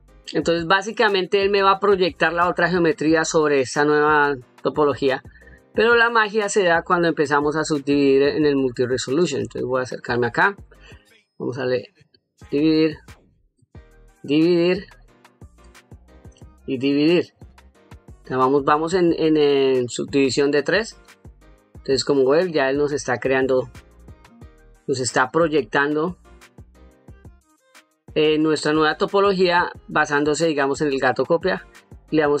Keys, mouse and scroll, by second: 5.3 click, 9.4-10.1 ctrl+middle drag, 11.3 click, 13.3 click, 15.3 click, 20.5-27.4 middle drag, 32.2 click.